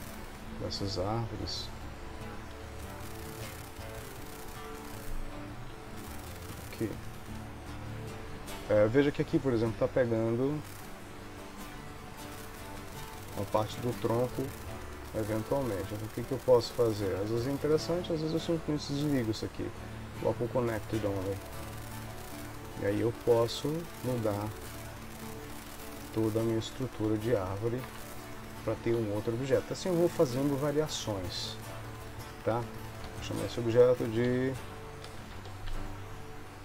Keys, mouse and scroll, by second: 2.6 g, 4.8 click, 5.8 g, 10.6 click, 12.2 click, 12.9 g, 17.0 click, 19.2 click, 20.5 click, 21.2 g, 22.1 click, 23.2 r, 25.0 click, 25.5 r, 27.9 Tab, 29.1 ctrl+s, 29.8 shift+middle click, 33.2 F2.